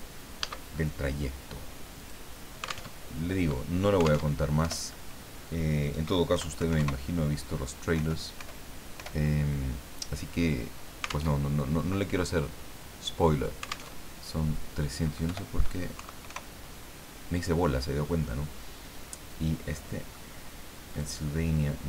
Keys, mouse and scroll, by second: 1.9 click, 2.9 alt+Tab, 4.3 alt+Tab, 4.6 alt+BackSpace, 6.3 KP_1, 6.6 KP_3, 6.8 KP_0, 7.9 BackSpace, 9.0 BackSpace, 11.3 alt+Tab, 13.9 alt+Tab, 15.3 Delete, 15.9 KP_3, 16.3 KP_0, 19.7 middle click, 21.0 click.